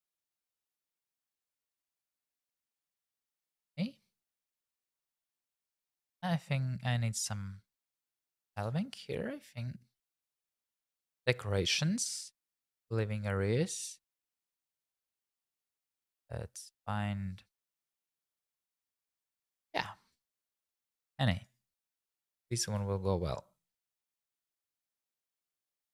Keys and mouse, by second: 2.5 click, 2.8 g, 3.0 shift+z, 3.6 click, 8.5-11.0 drag, 22.5 g, 22.8 shift+z, 23.9 click, 24.1-25.6 typing, 24.6 click, 25.2 click.